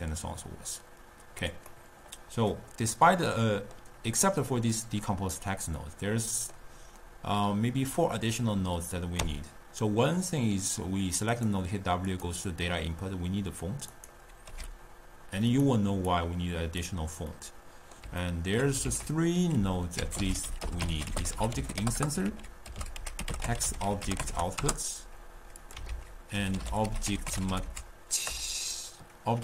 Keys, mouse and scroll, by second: 0.9-1.9 drag, 1.9-8.4 middle drag, 9.2 w, 14.6 g, 16.2-17.7 drag, 17.7-18.9 middle drag, 18.9 ctrl+a, 22.3 ctrl+a, 25.9 ctrl+a.